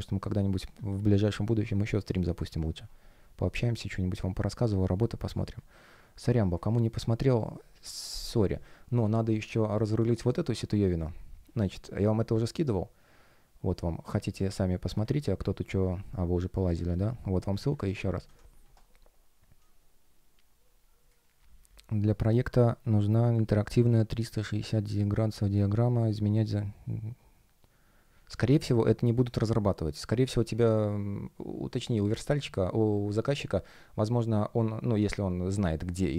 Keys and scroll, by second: 0.6 F1, 17.7 super+m, 18.1 Return.